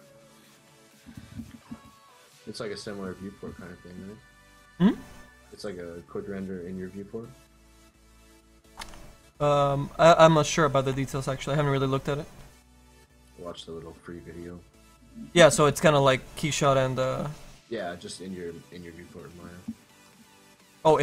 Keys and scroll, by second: 0.7 ctrl+z, 4.0 z, 14.1 ctrl+z.